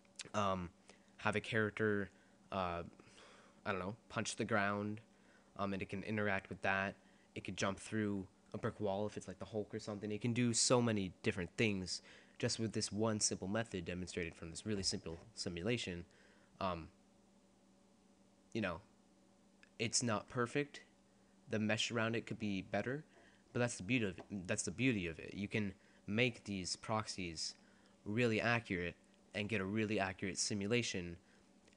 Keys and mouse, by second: 15.9-17.7 drag, 17.7 middle click, 19.6-21.9 middle drag.